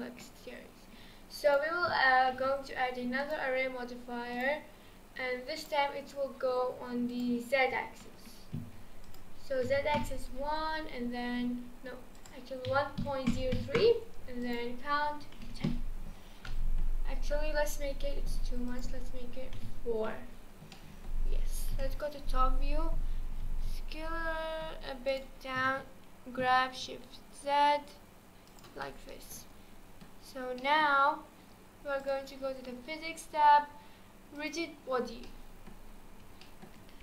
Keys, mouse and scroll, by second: 0.3-1.0 scroll up 2, 1.5-5.7 drag, 7.1-16.2 drag, 16.2 scroll down 2, 16.5-18.7 middle drag, 18.7-20.7 drag, 20.7-21.7 middle drag, 21.7 KP_7, 23.4 s, 25.6 g, 28.8-30.3 middle drag, 30.3 scroll up 1, 30.6-31.0 middle drag, 31.0-32.0 scroll up 1, 32.0 click, 34.3 click, 35.2-36.8 middle drag, 36.8 scroll up 1.